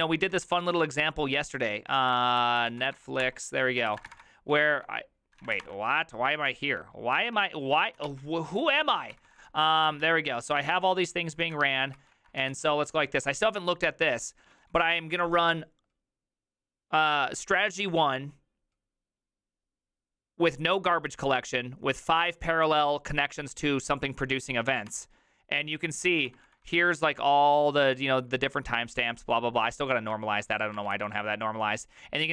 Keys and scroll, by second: 0.0 ctrl+c, 0.3 ctrl+a, 0.5 shift+l, 1.9-6.1 typing, 7.2 ctrl+d, 8.0 ctrl+a, 8.1 c, 8.7 ctrl+a, 8.8 2, 9.2 ctrl+c, 9.3 ctrl+c, 9.8 ctrl+a, 10.1-15.1 typing, 10.4 ctrl+a, 11.5 ctrl+a, 12.0 ctrl+c, 24.9 Return, 26.3 ctrl+d, 26.5 ctrl+d, 26.7 ctrl+d, 26.8 ctrl+d, 27.7-29.7 ctrl+d, 29.7 ctrl+u, 30.2-32.3 typing.